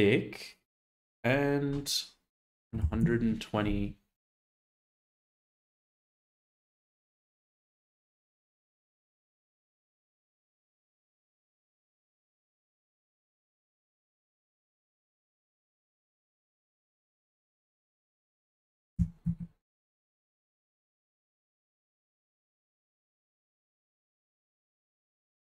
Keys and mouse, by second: 0.7-2.9 drag, 4.7-6.8 drag, 9.5 shift+middle click, 10.3 shift+middle click, 13.0-13.5 shift+middle drag, 14.8 g, 18.9 s, 19.2 z, 24.0 Tab, 25.2 shift+middle click.